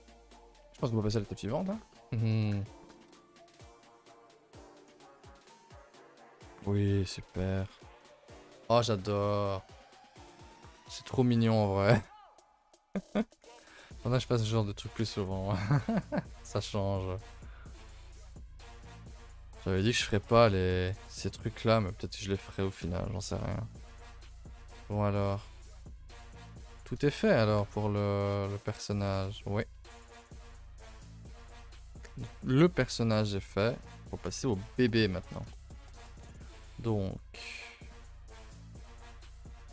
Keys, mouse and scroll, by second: 0.1 scroll down 1, 0.6 middle drag, 0.8 a, 1.4 middle click, 3.1 KP_0, 4.3 scroll down 5, 4.5 middle click, 5.3 z, 6.3 z, 6.6 click, 6.9 scroll down 3, 7.1 shift+middle drag, 7.4 a, 7.5 a, 7.8 ctrl+s, 8.1-8.4 shift+middle drag, 8.4 scroll down 2, 8.7-9.7 scroll up 1, 9.7 click, 10.1 click, 11.4 click, 11.9 scroll down 1, 12.1-12.6 scroll up 2, 12.6-12.9 middle drag, 12.9 scroll up 3, 13.1 a, 13.2 a, 13.5 ctrl+s, 14.3 click, 14.6 a, 14.8 a, 15.2 ctrl+s, 15.5-16.4 middle drag, 16.4 KP_0, 19.1-20.0 shift+middle drag, 20.0 scroll up 1, 20.2 scroll down 1, 20.2 shift+middle click, 20.4 scroll up 4, 21.0-22.5 shift+middle drag, 22.5 scroll down 4, 22.9-23.2 shift+middle drag, 23.2 scroll down 2, 23.5 shift+middle drag, 23.6 scroll up 3, 24.3-25.1 scroll down 3, 24.7 shift+middle drag, 25.6-26.3 shift+middle drag, 26.3 click, 26.7-27.3 scroll down 1, 27.3 g, 33.9 a, 34.0 a, 34.3 ctrl+s, 34.7 shift+middle click, 35.0 scroll up 2, 35.1 a, 35.3 a, 35.5-36.3 shift+middle drag, 36.3-36.8 scroll down 2, 36.8 middle click, 37.1 scroll up 2, 37.6 shift+middle click, 37.9-38.3 scroll up 2, 38.3-38.7 shift+middle drag, 38.7 a, 38.8 a, 39.1 middle click, 39.4-39.7 scroll up 1.